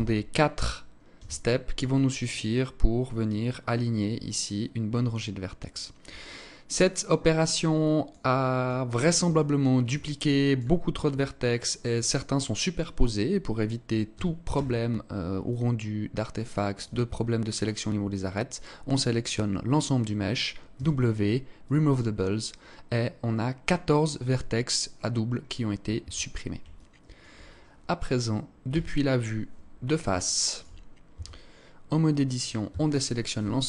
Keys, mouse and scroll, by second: 5.7 alt+click, 7.3 alt+click, 10.4-10.8 scroll up 1, 11.7 scroll up 1, 13.6 a, 14.0 a, 14.9 alt+click, 16.6 scroll up 1, 20.2 w, 25.4 Tab, 26.2 alt+click, 28.2 KP_1, 29.7 alt+shift+click, 30.6 Tab, 32.1 a, 33.5 z.